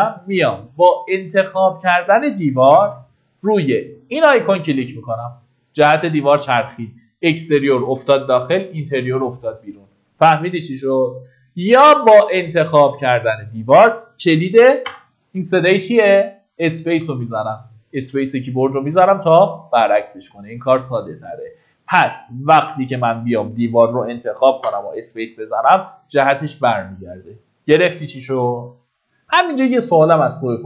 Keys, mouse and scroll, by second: 15.8 space, 19.3 click, 25.8 space, 25.9 click.